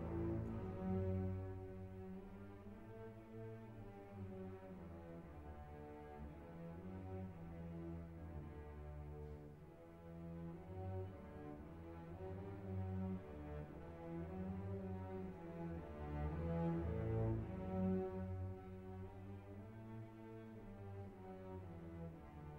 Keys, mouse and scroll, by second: 3.1 click, 7.6 click, 7.6-16.7 drag, 16.7-20.9 drag, 21.8-22.5 drag.